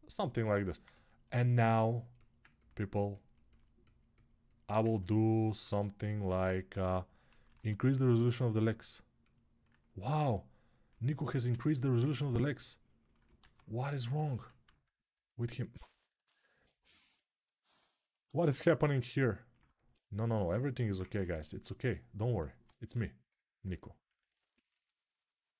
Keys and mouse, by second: 0.4 ctrl+alt+right click, 3.6-11.6 alt+drag, 6.0 alt+q, 7.1 shift+r, 10.1 ctrl+r, 13.2 alt+q, 14.1 1, 16.3-17.7 alt+shift+drag, 17.7-24.0 alt+shift+right drag, 24.0-25.5 drag.